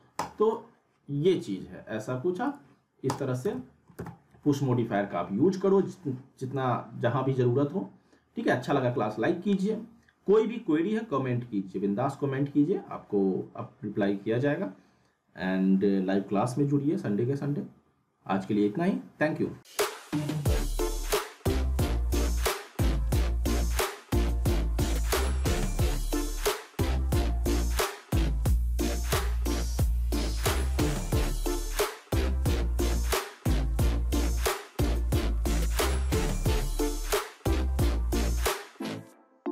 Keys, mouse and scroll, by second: 3.4 z, 3.5-4.7 alt+middle click, 4.0 z, 4.0-8.1 middle drag.